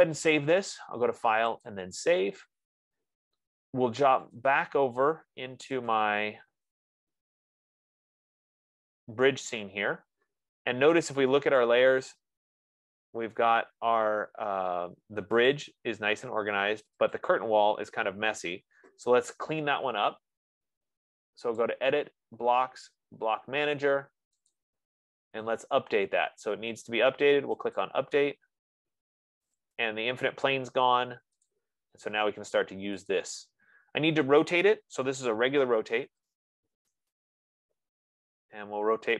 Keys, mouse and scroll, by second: 0.7 click, 2.2 click, 5.1 click, 6.3 click, 8.0 click, 12.1 click, 15.9 click, 17.6 click, 22.1 click, 24.9 click, 28.2 click, 29.4 F15, 30.0 click, 31.9 click, 33.4 click, 35.9-37.2 typing.